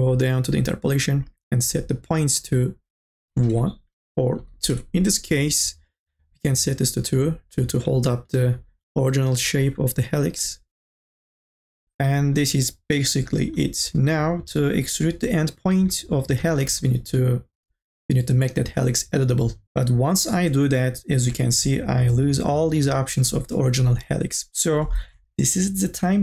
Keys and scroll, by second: 3.5 Return, 4.3 KP_2, 4.8 Return, 21.2 c, 25.1 ctrl+z.